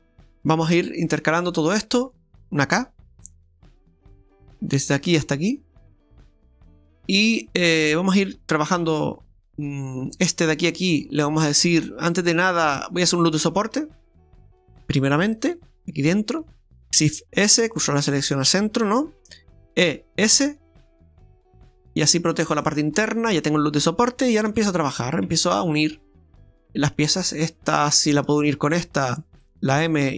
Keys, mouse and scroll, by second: 0.7 Tab, 1.2 Tab, 2.4 click, 3.9 j, 3.9 k, 7.1 scroll down 1, 7.2 scroll down 1, 9.6-9.9 scroll up 1, 10.2 right click, 10.6 shift+right click, 11.8-12.6 scroll down 5, 13.6 Tab, 14.2-14.5 scroll down 2, 14.6 shift+middle click, 15.4 Tab, 16.9 alt+shift+right click, 17.1 shift+s, 19.9 e, 23.0-24.5 scroll up 3, 24.5 Tab, 24.9 scroll up 1, 25.3 Tab, 26.9 click, 27.7 right click, 28.3 shift+right click, 29.9 m.